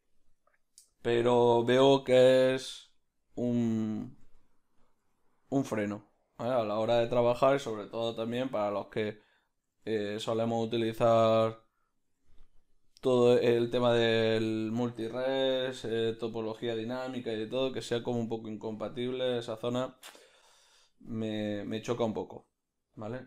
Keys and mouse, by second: 1.1 g, 4.2 s, 5.0 g, 8.3 r, 12.1 g, 13.1-14.5 ctrl+middle drag, 14.5-16.0 right drag, 16.0 Tab, 16.0 b, 16.3-18.8 ctrl+middle drag, 17.4 f, 18.8-23.2 drag.